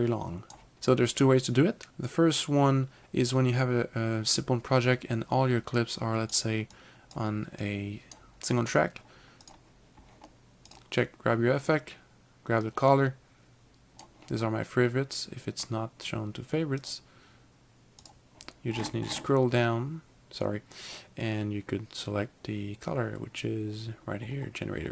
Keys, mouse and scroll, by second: 1.9 ctrl+z, 5.9 click, 6.8 click, 7.7 click, 9.5 click, 12.7 click, 16.9 click, 18.7-20.3 scroll down 3, 20.3 scroll down 1, 23.3-23.9 scroll down 1, 23.9-24.5 scroll down 3.